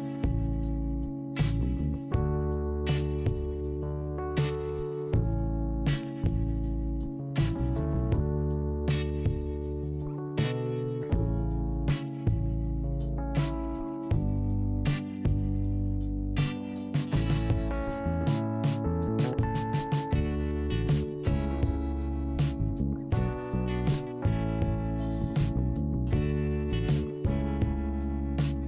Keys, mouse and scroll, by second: 0.4 click, 1.8 click, 5.9 click, 7.3 click, 12.1 scroll down 1, 13.3 click, 14.2 5, 16.3-17.4 scroll up 1, 17.7 click, 20.6 click, 20.9 click, 21.4 scroll down 1, 22.6 click, 23.3 click, 24.3 click, 25.1 click, 26.0 click, 27.9 p.